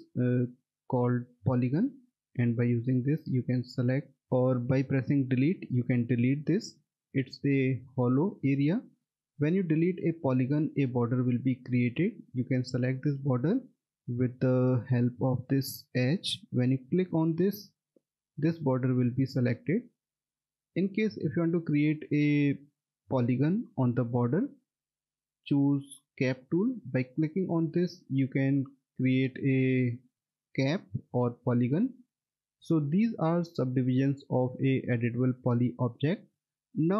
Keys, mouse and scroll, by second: 0.2 scroll, 0.4 alt+middle click, 5.6 Delete, 8.2 alt+middle click, 9.8-12.5 scroll up 1, 12.5 click, 13.5 middle click, 14.3 F3, 14.7 click, 17.8 alt+middle click, 21.1 F3, 27.4 click, 29.1 alt+middle click.